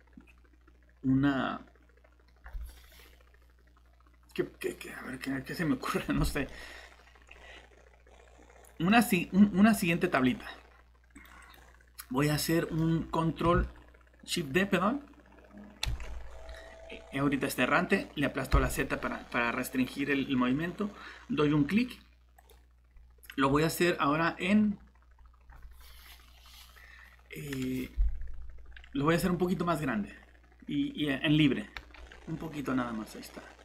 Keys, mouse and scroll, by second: 6.5 middle click, 9.0 scroll up 1, 10.2 click, 12.4 middle click, 14.0 typing, 16.0 typing, 18.5 z, 22.4 click, 31.8 s.